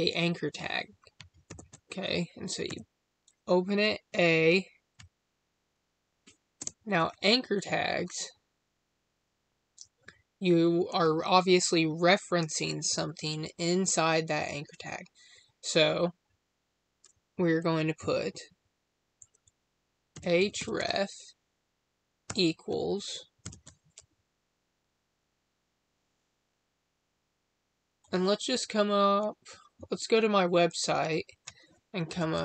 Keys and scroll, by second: 6.5 space.